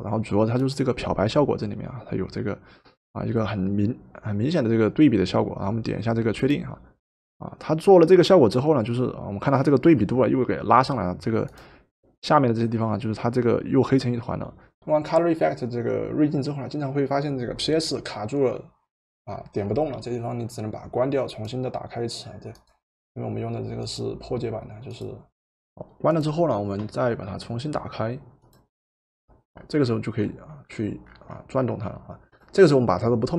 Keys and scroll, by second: 25.4 Return.